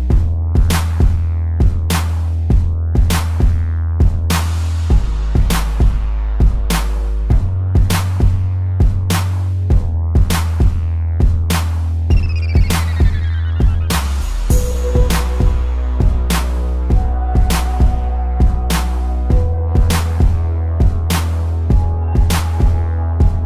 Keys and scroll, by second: 1.4 space, 4.2 space, 8.2 space, 9.5 ctrl+0, 9.9 z, 11.7 p, 12.0 ctrl+=, 14.1 space, 19.5 ctrl+0, 19.9 z, 21.6 a.